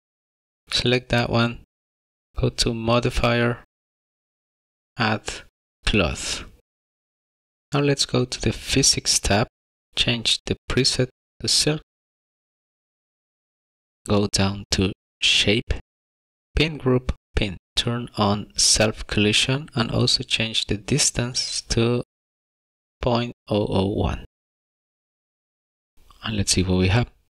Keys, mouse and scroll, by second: 1.5 click, 4.5 click, 9.9 click, 9.9 scroll up 10, 11.2 click, 13.8-14.2 scroll down 21, 15.4 click, 16.2 click, 17.9 click, 19.1 click, 24.2 click, 24.6 KP_0, 25.3 click, 25.6 KP_0.